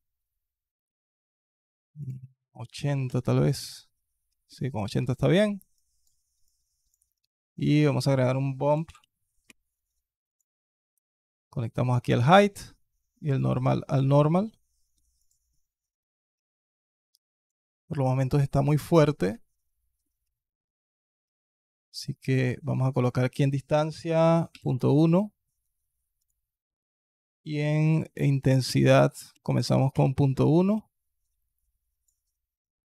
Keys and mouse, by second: 2.0 click, 4.3 middle click, 5.7 click, 6.3-6.7 drag, 7.4 click, 7.8 shift+a, 11.0-11.9 middle drag, 12.3 middle click, 13.2-13.8 drag, 14.8-15.3 ctrl+shift+drag, 16.5-17.4 alt+drag, 21.2-21.8 alt+drag, 22.7-24.5 drag, 26.1-29.8 drag, 31.4 alt+click.